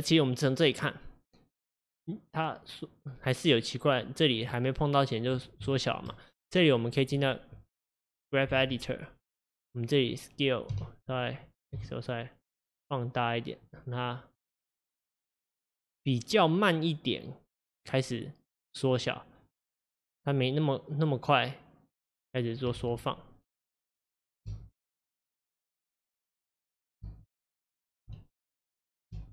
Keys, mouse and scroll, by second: 5.8 shift+middle click, 6.1 shift+scroll, 6.2-8.6 scroll up 2, 9.5-10.8 drag, 10.8 s, 14.3-17.7 drag, 20.4-22.9 drag, 22.9 ctrl+z, 24.5 space, 27.1 space, 28.1 s, 29.2 space.